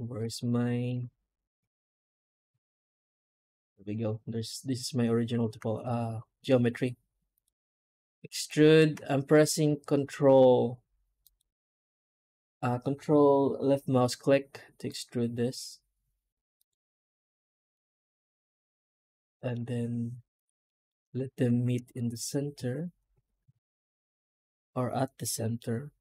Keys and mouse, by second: 0.3 middle click, 1.7 middle click, 2.2 middle click, 2.8 middle click, 3.3 alt+middle click, 3.5 middle click, 3.8 middle click, 4.2 click, 4.5 middle click, 4.9 alt+middle click, 5.2 alt+middle click, 9.3 ctrl+z, 20.5 middle click, 20.7 middle click, 21.8 middle click, 22.1 middle click, 22.6 alt+middle click, 23.4 alt+a.